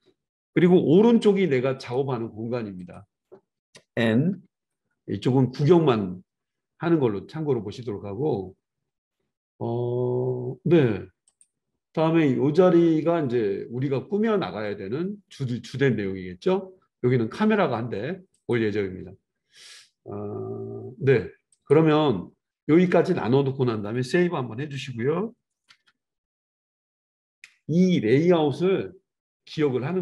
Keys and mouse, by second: 4.3 n, 11.2 click, 11.4-21.6 middle drag, 18.3 click, 21.6 click, 21.7-30.0 middle drag, 28.0 ctrl+s.